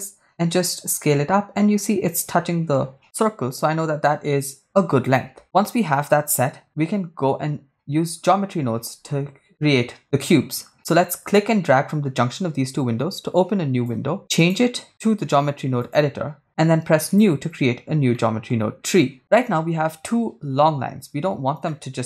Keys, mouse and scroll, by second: 5.1 click, 11.5-13.9 drag, 14.4-16.0 drag, 17.1 click, 18.1 middle click, 18.9-19.3 scroll up 5, 19.2 middle click, 21.1-21.6 scroll up 2, 21.7 middle click.